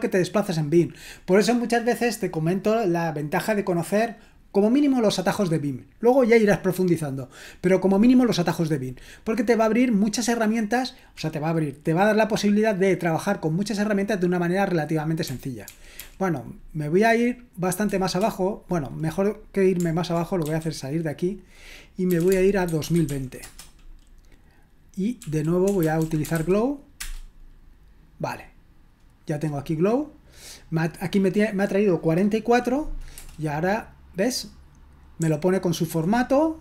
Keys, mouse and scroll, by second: 15.2-16.0 typing, 20.4 typing, 21.9-23.5 typing, 25.2-27.0 typing, 33.2 Return, 35.2-36.0 typing.